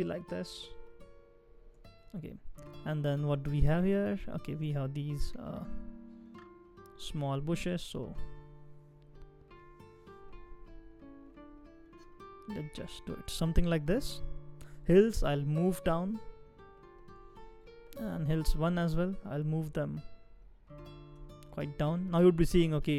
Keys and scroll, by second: 0.3 shift+Down, 0.9 shift+Down, 5.1 shift+Up, 5.5 shift+Up, 5.6 shift+Up, 7.5 shift+Down, 8.0 shift+Up, 8.6 shift+Up, 9.5 shift+Down, 10.4 shift+Down, 10.7 shift+Up, 11.2 shift+Up, 12.5 shift+Down, 15.2 shift+Down, 15.6 shift+Down, 15.7 shift+Down, 18.5 shift+Down, 19.0 shift+Down, 19.1 shift+Down, 21.8 shift+Down.